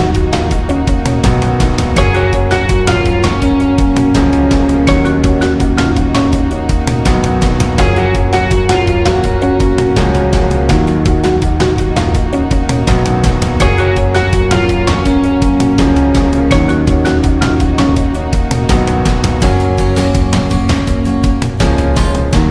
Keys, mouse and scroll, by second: 2.1 click, 12.4-19.5 drag, 20.1-22.5 drag.